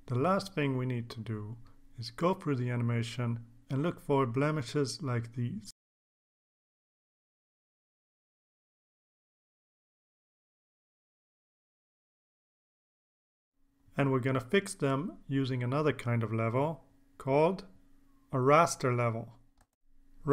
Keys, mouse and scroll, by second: 1.0-3.4 drag, 5.7-13.0 drag, 13.3 click, 13.7 right click, 15.6 click, 17.1 click, 19.2 click, 20.2 click.